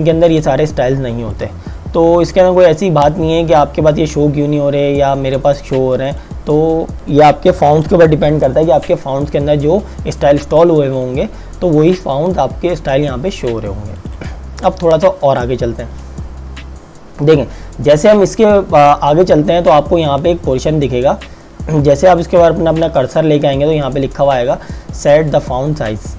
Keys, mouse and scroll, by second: 6.1 click, 11.0 click, 14.1 click.